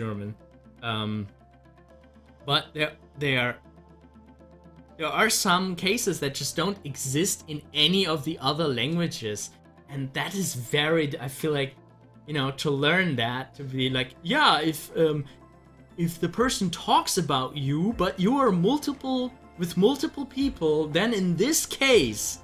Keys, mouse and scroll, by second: 6.3 scroll up 1, 11.4-15.5 drag, 15.5 ctrl+z.